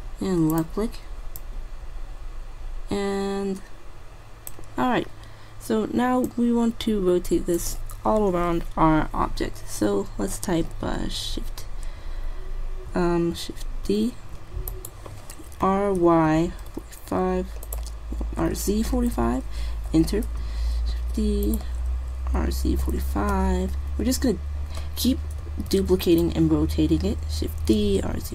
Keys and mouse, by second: 1.4-3.1 drag, 5.0 middle click, 6.4-8.0 drag, 14.0 shift+d, 15.7 r, 18.5 r, 21.1 shift+d, 22.4 r, 25.8 shift+d, 28.0 r.